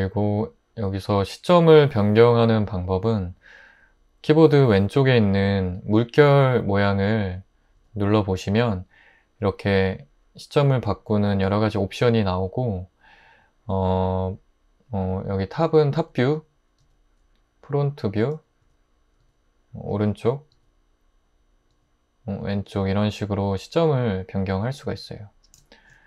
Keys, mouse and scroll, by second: 16.8 click, 18.6 click.